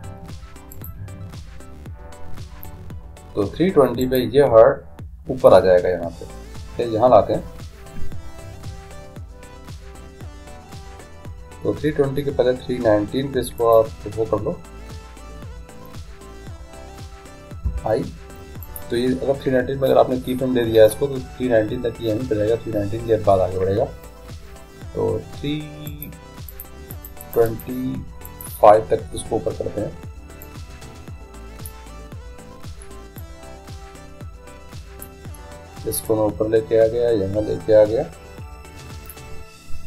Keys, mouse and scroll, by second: 1.0-2.6 drag, 4.5-6.0 right drag, 13.8-15.5 drag, 17.7 i, 25.9-30.2 drag, 31.0-35.2 drag, 36.3-38.1 drag.